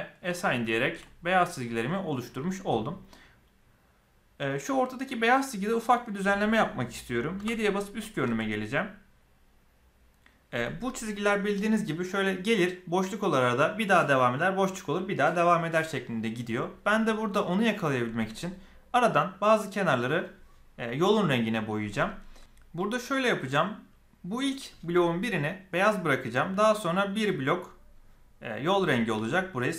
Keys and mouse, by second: 0.0 click, 0.7 shift+middle click, 1.0-1.5 middle drag, 1.9 shift+middle click, 7.3 KP_7, 22.3 alt+a, 26.9 click.